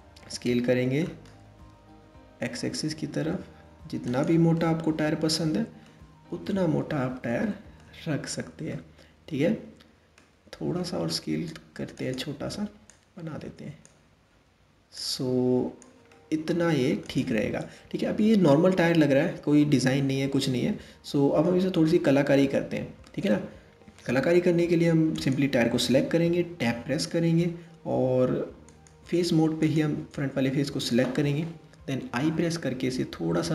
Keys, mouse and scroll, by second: 1.0 s, 4.2-5.9 middle drag, 5.9-6.9 scroll up 1, 6.9-7.6 shift+middle drag, 7.6-8.3 scroll up 3, 8.3-10.4 middle drag, 10.4 s, 12.5 click, 14.6 click, 15.7-16.7 middle drag, 16.7 click, 17.1-17.4 scroll down 1, 17.8-20.8 middle drag, 21.9-22.4 scroll up 2, 22.6-23.8 middle drag, 24.7 click, 25.9 Tab, 28.3 click, 29.2 click, 31.6 i.